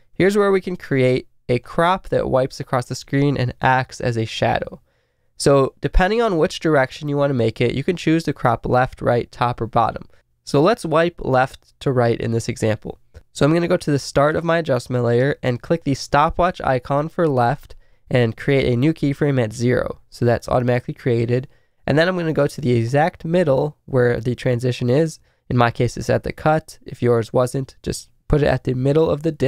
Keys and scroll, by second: 1.6 Left.